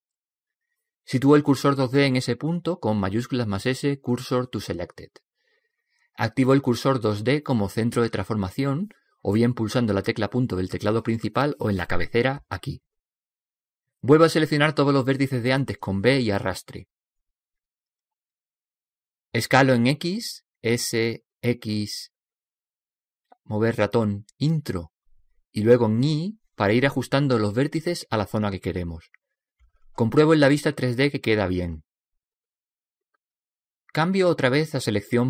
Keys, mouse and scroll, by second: 0.6 middle click, 2.6 shift+s, 10.0 click, 15.4 b, 18.8 s, 25.5 s, 30.4-32.3 middle drag.